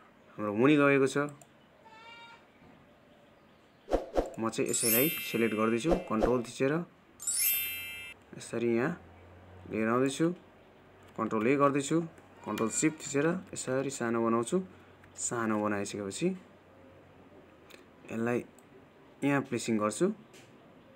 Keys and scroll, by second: 12.2 ctrl+a.